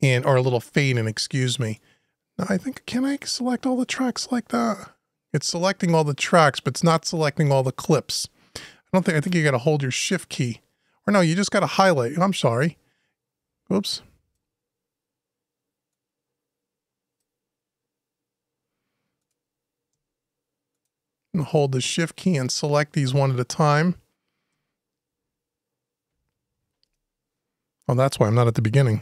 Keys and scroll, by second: 26.6 Return.